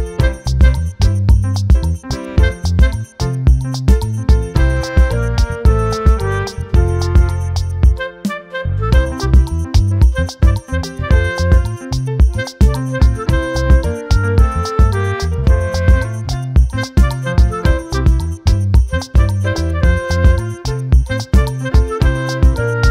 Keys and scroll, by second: 16.8 ctrl+t.